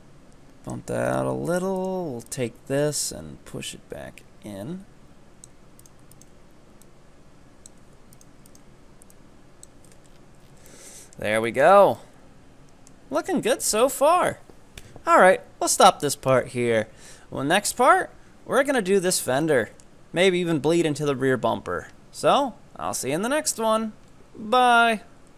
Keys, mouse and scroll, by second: 1.1 right click, 1.5 ctrl+right click, 1.8 ctrl+right click, 3.1-5.9 drag, 5.9 right click, 6.9-8.2 drag, 8.2 right click, 8.6 ctrl+right click, 9.2-9.9 drag, 9.9 Tab, 10.1-10.7 scroll down 11, 10.7-11.7 middle drag, 11.7 scroll down 2, 12.0-15.0 middle drag, 17.8 KP_3, 19.5 shift+middle drag.